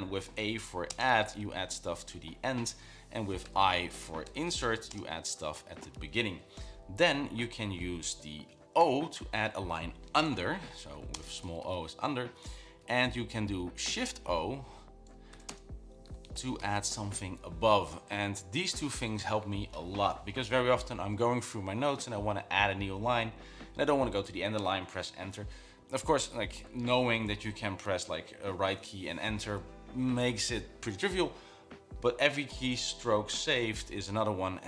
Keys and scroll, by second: 0.0-0.1 typing, 1.6-2.2 typing, 4.2-5.7 typing, 5.8 Escape, 9.2 typing, 11.1-12.6 typing, 12.6 Escape, 13.0 Up, 14.2 shift+o, 15.7-17.5 typing.